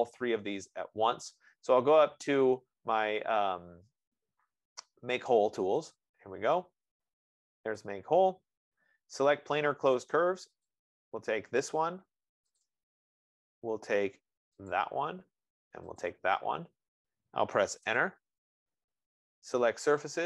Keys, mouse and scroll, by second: 6.3 click, 8.1 click, 18.1 Return.